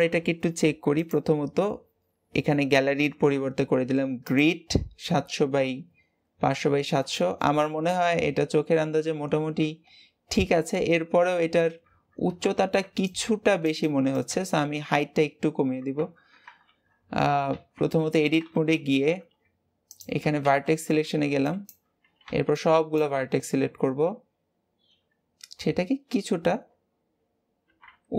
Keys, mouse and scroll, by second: 0.8-4.0 drag, 4.8-6.6 scroll up 10, 6.6-7.0 scroll up 4, 7.0-7.6 shift+middle drag, 7.6-8.0 scroll down 2, 9.2 scroll down 2, 9.5-10.9 scroll up 4, 10.9-11.2 scroll down 1, 11.6 Tab, 12.2 Tab, 14.4-15.4 scroll down 14, 15.8 Tab, 16.6 alt+a, 18.4 Tab, 19.1 Tab, 19.8 click, 20.4 alt+z, 21.0 b, 24.2-24.8 scroll up 1, 24.8-25.2 scroll up 3, 25.9-27.2 scroll up 9, 27.3 scroll up 2, 27.6 g.